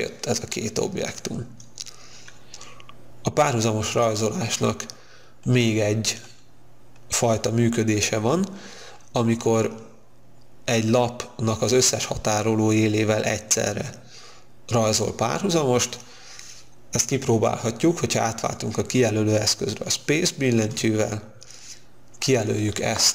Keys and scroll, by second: 20.7 space.